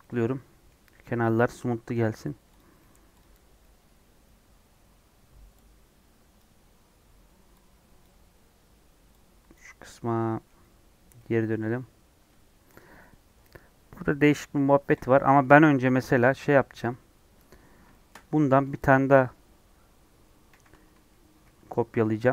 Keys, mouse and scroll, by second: 0.0-1.9 middle drag, 1.9 /, 2.5 click, 2.7 middle click, 3.1 click, 12.7 click, 15.3 click, 15.6 KP_1, 16.7 KP_3, 17.9-20.4 shift+middle drag, 20.4 shift+d.